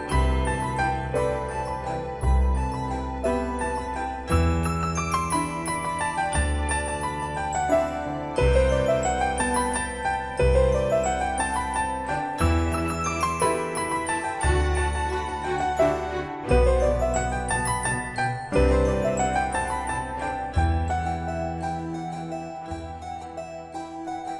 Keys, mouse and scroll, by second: 9.4 click, 16.0 typing, 18.4-19.4 drag.